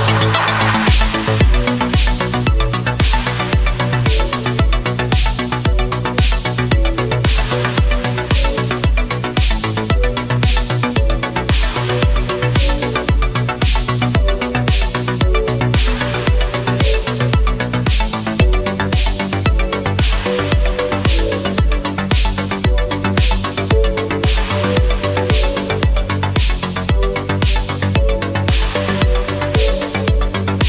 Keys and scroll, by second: 0.5 space, 4.0 space, 5.1 space, 7.5 space, 8.9 space, 16.5 space, 19.3 space, 20.2 space, 22.3 ctrl+z, 25.4 ctrl+z, 29.0 space, 30.2 ctrl+z, 30.3 space.